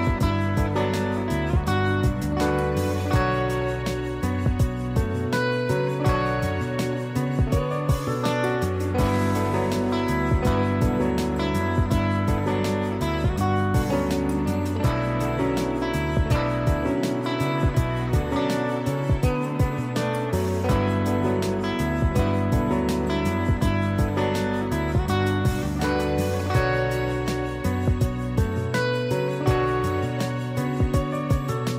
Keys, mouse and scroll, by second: 0.8 ctrl+click, 1.2 ctrl+e, 1.9 click, 5.4 z, 5.8 click, 6.7 space, 6.9 click, 7.2 space, 8.2 click, 8.4 space, 8.5 click, 8.9 space, 13.5 click, 21.4 click, 23.6 click, 26.3 click, 28.4 click, 30.0 ctrl+shift+e, 30.8 ctrl+a.